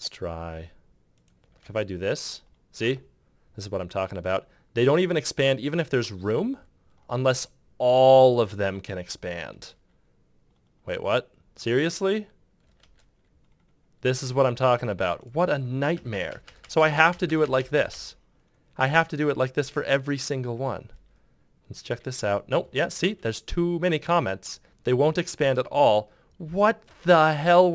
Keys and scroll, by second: 1.3 ctrl+Return, 9.3 ctrl+Return, 12.5 ctrl+Return, 15.7 Return, 20.7 BackSpace, 26.8 ctrl+Return.